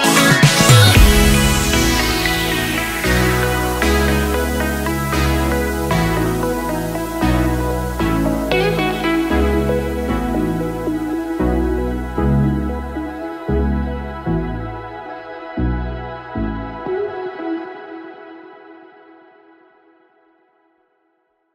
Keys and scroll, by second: 4.2 ctrl+t.